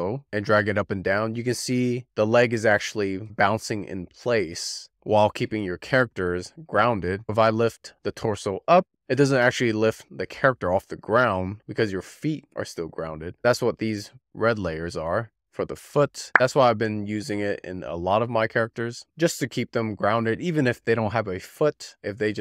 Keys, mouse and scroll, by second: 4.6-7.2 drag, 9.2-11.4 drag, 13.1 scroll up 2, 13.2-16.2 middle drag, 16.5 click, 16.7 middle click, 17.4 r, 17.6 click, 18.1 alt+middle click, 18.3 click, 19.2 z, 19.6 shift+middle click, 20.1 scroll up 10, 20.8 click, 21.2 shift+middle click, 22.1 shift+middle click, 22.3 z.